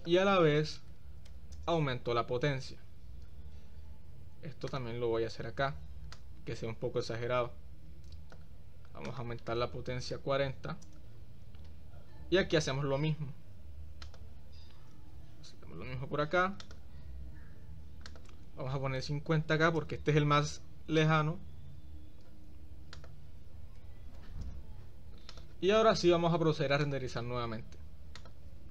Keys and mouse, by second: 0.2-1.8 drag, 5.0 click, 6.3-8.7 drag, 9.2-11.1 drag, 12.3 shift+d, 15.2 shift+d, 18.4-20.1 drag, 21.1 click, 23.3-24.7 drag, 25.5 click, 27.2-28.7 drag.